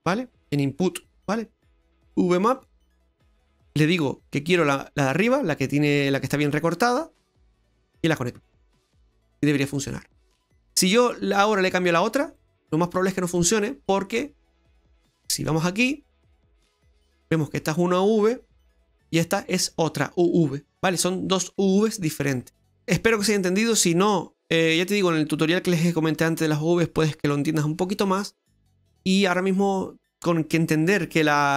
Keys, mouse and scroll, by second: 3.8 click, 7.2 click, 9.9 middle click, 11.9 click, 13.4 middle click, 15.6 click, 18.8 click, 20.8 click, 22.6 middle click.